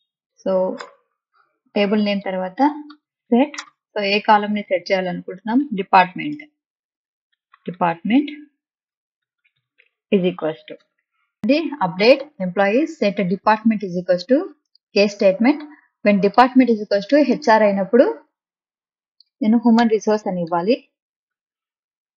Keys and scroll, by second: 0.8 Return, 2.4-3.7 typing, 5.1-10.9 typing, 19.8 BackSpace, 20.5 ', 21.3 Left.